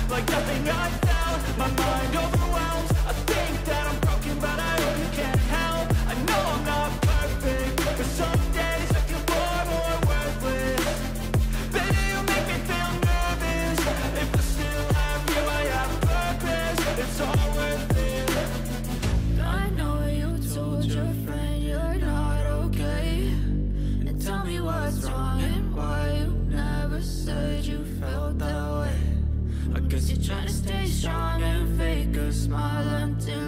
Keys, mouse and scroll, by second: 0.8 double click, 4.8 double click, 5.0 double click.